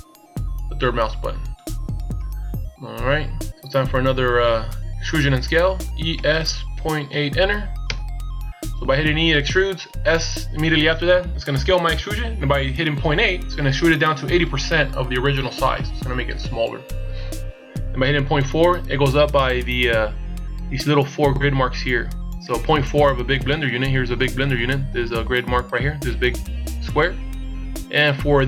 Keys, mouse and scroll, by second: 0.3 shift+scroll up 2, 5.8 e.